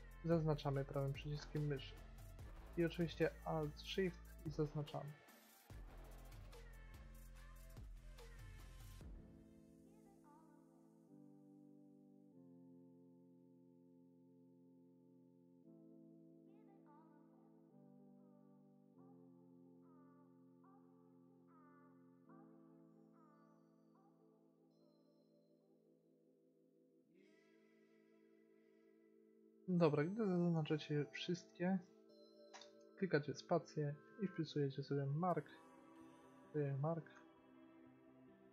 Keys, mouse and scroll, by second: 0.3-2.8 middle drag, 3.2 middle click, 10.8 middle click, 12.7-13.7 middle drag, 16.3-18.2 middle drag, 24.4 click, 25.7-26.9 drag, 29.7-31.4 middle drag, 32.7 space, 36.4 BackSpace.